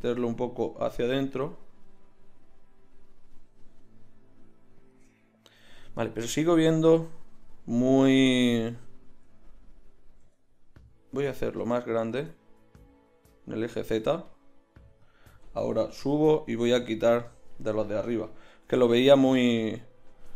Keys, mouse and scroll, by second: 8.1-10.2 middle drag, 10.2 s, 16.1 g, 17.7-19.9 right drag, 18.6 l, 19.1 l.